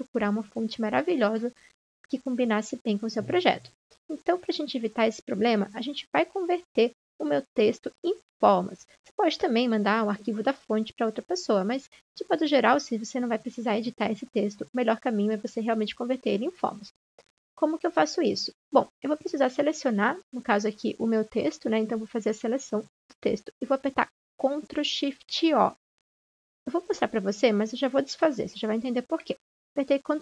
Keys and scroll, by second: 29.9 ctrl+0.